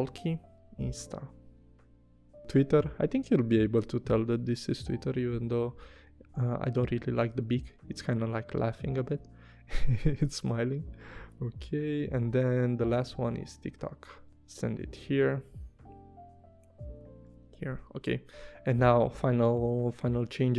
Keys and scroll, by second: 0.3-1.3 typing, 4.7 i, 5.3 v, 17.0 i, 17.5 v.